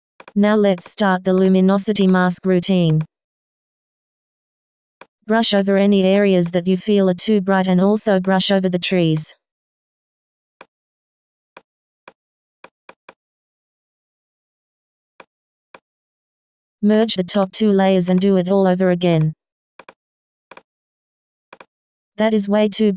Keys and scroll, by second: 3.9 b.